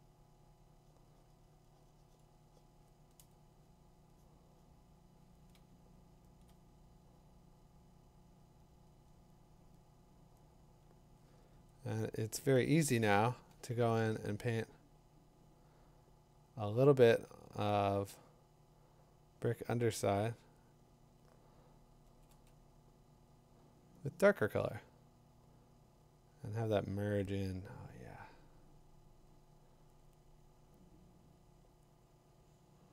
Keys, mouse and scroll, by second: 3.2 ], 6.4 click, 12.3 click, 13.0 click, 22.0 ], 22.3 ], 24.5 [, 26.3 [.